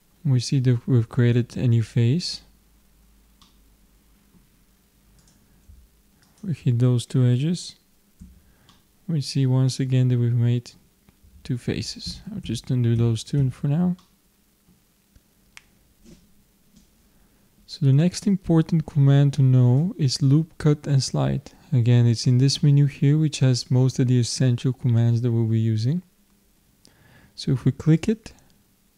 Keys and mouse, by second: 3.4 middle click, 5.2-8.1 drag, 8.3 f, 9.1-10.4 middle drag, 12.1 ctrl+z, 12.4 ctrl+z, 13.0 ctrl+z, 13.4 ctrl+z, 14.0 middle click, 28.0-28.9 drag.